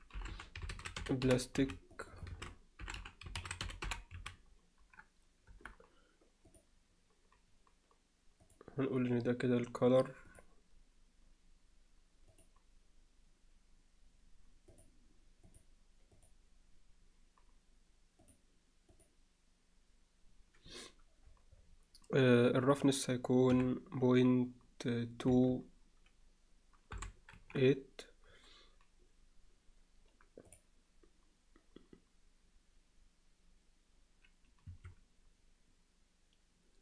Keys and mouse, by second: 6.6 click, 22.7-28.0 drag, 30.6-36.8 drag.